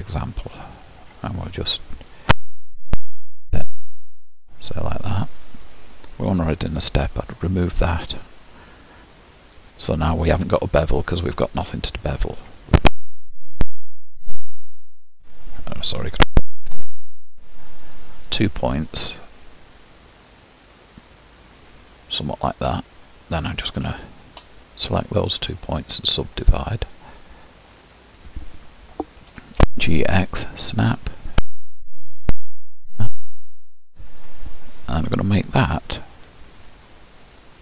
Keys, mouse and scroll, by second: 1.2 click, 2.7 g, 6.1 click, 7.4-11.8 drag, 13.7 ctrl+b, 16.6 ctrl+shift+b, 23.6 click, 25.1 shift+click, 26.9 right click, 27.7 click, 29.3 g, 31.9 g.